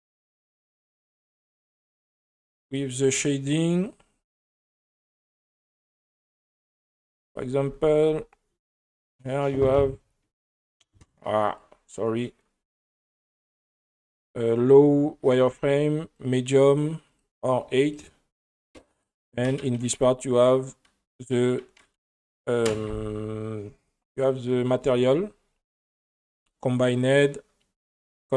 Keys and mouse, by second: 2.7-3.9 drag, 4.5 middle drag, 5.4 space, 6.6 space, 7.2 click, 7.7 space, 8.1 space, 8.7 click, 10.6-11.8 drag, 15.4-16.3 drag, 17.1-18.0 drag, 19.0 click, 19.9-21.1 drag, 26.3-28.1 drag.